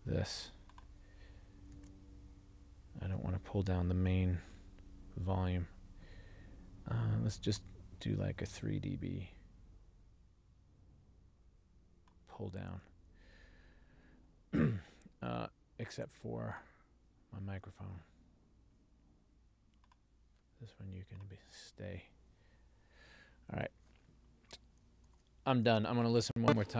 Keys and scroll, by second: 1.9 super+a, 25.2 ctrl+alt+l.